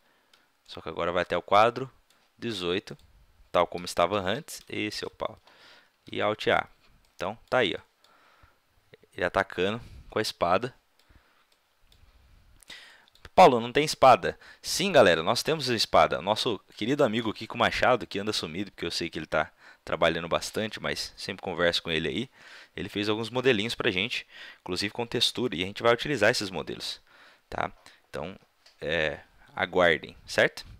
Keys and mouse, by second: 0.7-2.4 drag, 2.9 click, 6.0 alt+a, 11.9-14.9 middle drag.